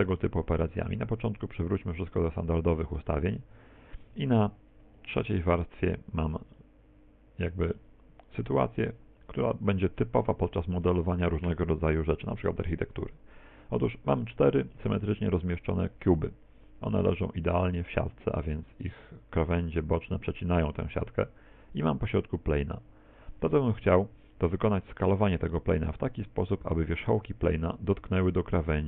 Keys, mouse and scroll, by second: 0.3 click, 3.6 Tab, 4.2 Tab, 5.2 3, 5.8-6.6 scroll down 3, 6.6 middle click, 7.9 middle click, 10.4 middle click, 12.5 shift+middle click, 17.5 middle click, 22.1 right click, 23.2 middle click, 24.4 middle click.